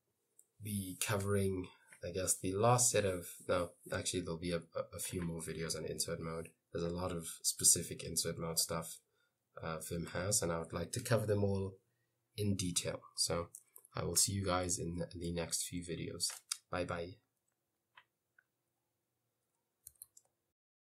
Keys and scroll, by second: 0.0-0.6 typing, 4.1 j, 4.5 j, 9.1-11.0 typing.